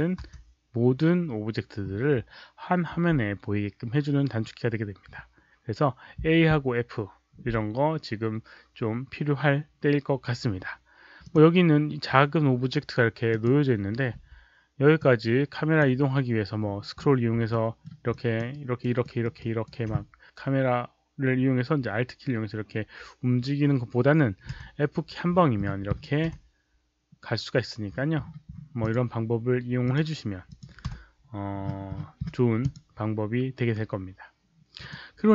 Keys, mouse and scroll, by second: 0.1 a, 11.1 click, 13.2 click, 14.1 w, 14.9-15.7 drag, 14.9 w, 16.5-17.2 scroll up 1, 17.4 alt+middle click, 18.0 alt+click, 18.4 alt+right click, 18.9 alt+middle click, 19.3 alt+right click, 24.5 f, 25.2-26.1 scroll down 1, 27.8-28.7 scroll down 1, 28.7 click, 29.8 click, 30.4 click, 30.8 f, 31.5-32.5 scroll down 1, 32.5 click, 34.7 click.